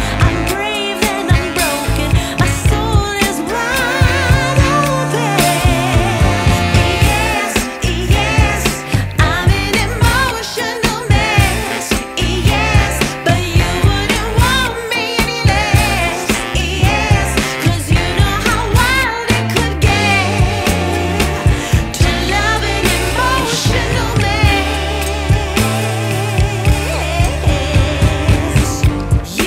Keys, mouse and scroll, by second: 8.2 click, 9.2-11.1 middle drag, 11.1 shift+a, 13.9-21.5 drag, 21.7 ctrl+s, 22.5 middle click, 23.3-25.4 scroll up 6, 25.4-28.6 middle drag, 28.6-29.4 drag.